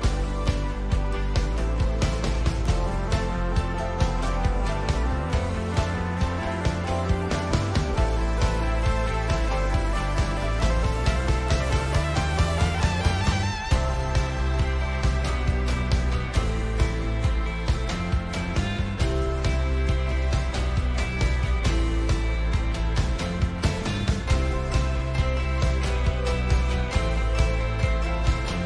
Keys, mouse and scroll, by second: 1.7-2.9 middle drag, 2.9-8.0 drag, 8.0 middle click, 8.7 click, 8.8-9.3 middle drag, 9.3-10.3 drag, 10.3-15.2 middle drag, 15.2 click, 15.2-19.0 middle drag, 19.0 click, 23.4-28.6 middle drag, 24.5-28.6 drag.